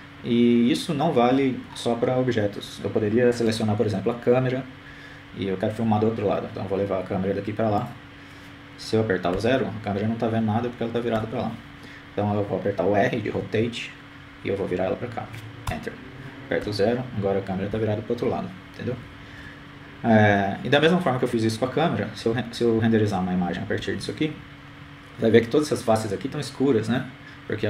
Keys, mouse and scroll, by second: 0.5 right click, 2.1 g, 5.0-7.1 middle drag, 7.1 right click, 9.5 g, 13.0 KP_0, 14.9 KP_0, 17.1 r, 20.6-24.6 typing.